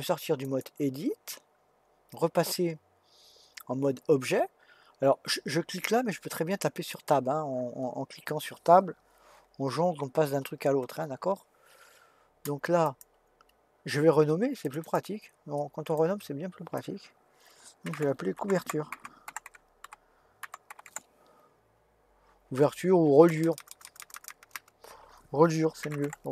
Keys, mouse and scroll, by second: 0.4-3.6 drag, 9.4 Tab, 10.0 Tab, 10.4 Tab, 10.8 Tab, 12.8 click, 14.6 click, 14.8-18.0 drag, 23.4-24.3 typing.